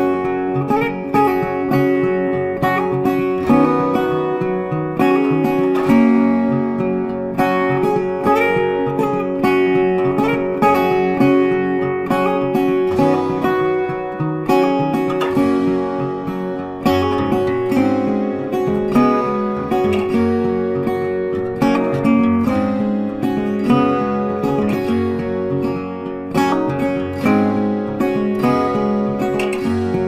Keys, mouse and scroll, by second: 0.1 click, 3.0 a, 3.5 click, 6.3 click, 10.2 click, 18.5 ctrl+Num_Lock, 18.6 ctrl+a, 19.5 click, 24.5 click.